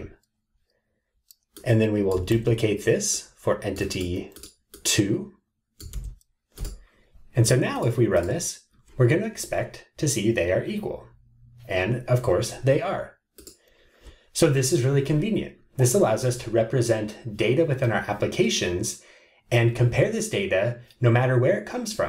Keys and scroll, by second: 2.3 super+c, 6.2 super+v.